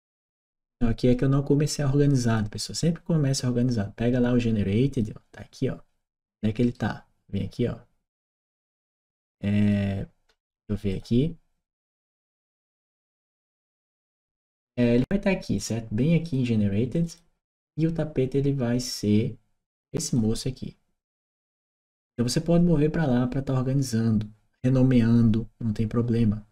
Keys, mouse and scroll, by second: 2.0 click, 4.7 click, 6.4 right click, 8.2 click, 8.6 right click, 9.4 click, 10.7 click, 11.9 right click, 15.3 click, 16.0 click, 19.8 click.